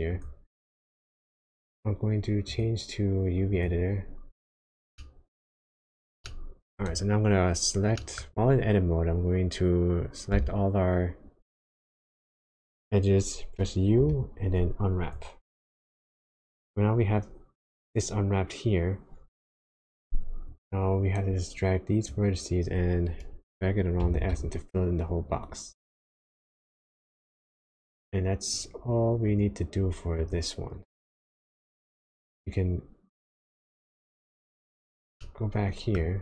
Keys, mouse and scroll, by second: 33.6 click, 35.2 shift+middle click.